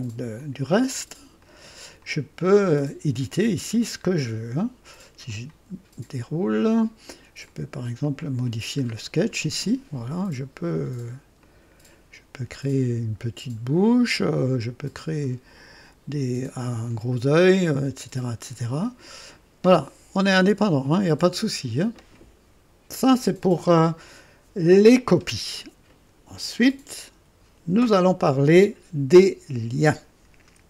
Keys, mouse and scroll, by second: 0.4 click, 1.4 click, 2.0 click, 3.6 click, 4.0-4.3 scroll down 1, 5.2 click, 5.7-6.0 scroll down 1, 7.4 click, 8.0 click, 8.9 scroll up 1, 9.4 right click, 11.4-14.0 drag, 15.2-17.2 drag, 18.6 click, 20.3-22.2 drag.